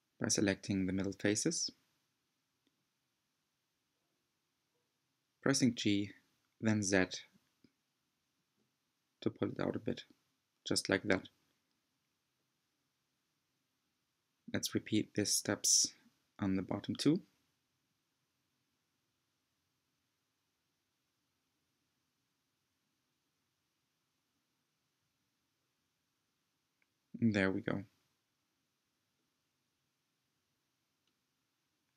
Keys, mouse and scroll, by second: 4.6-5.7 middle drag, 5.7 g, 10.8-12.1 middle drag, 12.1 scroll down 1, 12.7-16.6 middle drag, 16.6 c, 17.5-18.6 middle drag, 18.6 g, 21.6 click, 22.3 g, 24.0-27.1 middle drag.